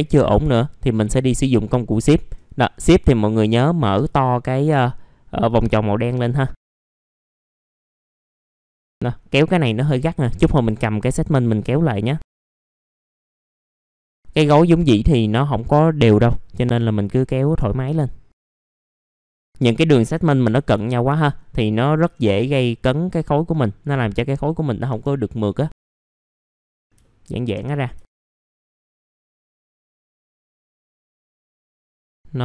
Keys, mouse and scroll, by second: 0.6-1.1 scroll up 1, 1.1 scroll down 1, 1.3 middle click, 1.6 scroll up 1, 2.5 click, 4.5-5.4 scroll up 1, 5.4 click, 6.2 middle click, 6.5 scroll down 1, 6.6 middle click, 6.7 scroll up 1, 6.9 click, 7.1 scroll down 1, 7.2 middle click, 7.3-7.8 scroll up 2, 7.4 click, 7.8 click, 8.4 scroll down 1, 8.5 middle click, 8.7 scroll up 1, 8.9 middle click, 9.6 scroll down 1, 9.9 middle click, 10.7-11.8 scroll up 1, 11.8 click, 12.4 middle click, 12.5 scroll down 1, 12.6 scroll up 1, 12.8 click, 13.1 middle click, 13.4 scroll up 1, 13.5 click, 13.6 middle click, 13.6 scroll down 1, 13.7 click, 14.1 scroll up 1, 14.3 click, 14.9 scroll down 1, 15.2 middle click, 15.5-16.3 scroll up 1, 16.3 click, 16.8-17.1 scroll down 1, 17.1 middle click, 17.4-17.8 scroll up 1, 17.8 alt+middle click, 18.3 right click, 18.6 alt+middle click, 18.8 scroll up 1, 19.8 alt+middle click, 21.3-21.6 scroll down 1, 21.6-22.4 scroll up 2, 22.4 click, 24.9 F3, 25.3 click, 25.9 ctrl+z, 25.9 click, 26.2 F3, 26.3 click, 26.6 F3, 26.8 scroll down 1, 27.5 F3, 28.0 alt+middle click, 28.8 F4, 29.0 scroll down 1, 29.1 alt+middle click, 29.5 scroll up 1, 29.7 alt+middle click, 30.1-30.5 scroll down 1, 30.5-31.5 drag, 31.5 click, 31.6 scroll down 1, 31.7 middle click.